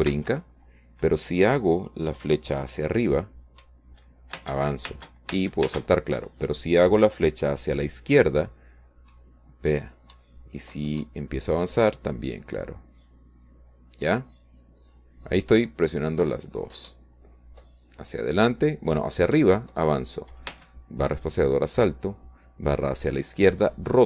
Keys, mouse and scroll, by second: 2.4 space, 6.5 Up, 7.3 space, 12.0 Left, 13.0 Up, 14.8 Left, 19.8 Up, 22.3 Up, 23.4 space.